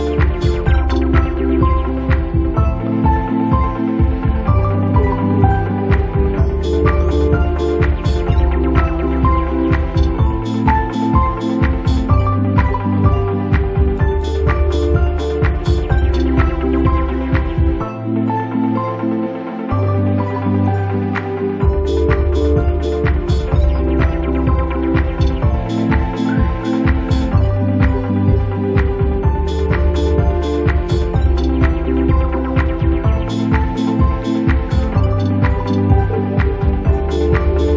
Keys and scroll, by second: 5.3 space, 23.5 Escape.